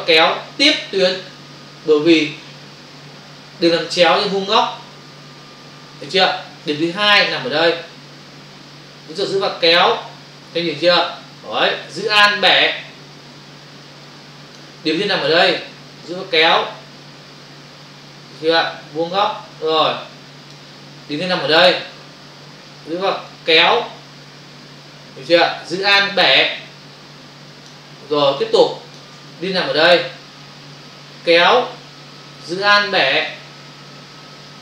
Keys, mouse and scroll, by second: 6.7 space, 6.8 click, 7.0 space, 9.2 click, 16.0 click, 23.3 click, 28.2 space, 28.3 click, 28.5 space, 30.8 click.